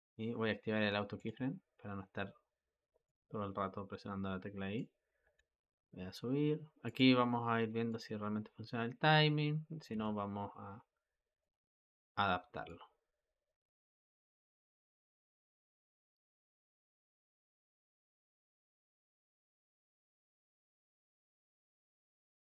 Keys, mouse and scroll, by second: 1.0 click, 2.9-5.1 drag, 5.1 g, 7.7-9.8 drag, 9.8 g, 12.5-15.0 drag, 15.0 g, 16.6-17.7 drag, 17.7 g, 20.8-21.8 drag, 21.8 g.